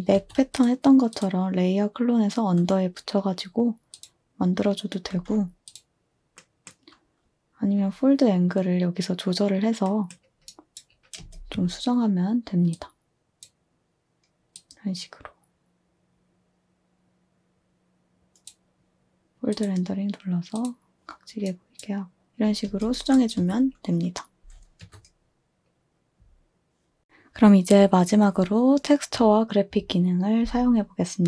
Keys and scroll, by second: 0.1 a, 5.0 z, 11.2 space, 23.5 space, 24.2 space, 24.4 space, 24.7 space.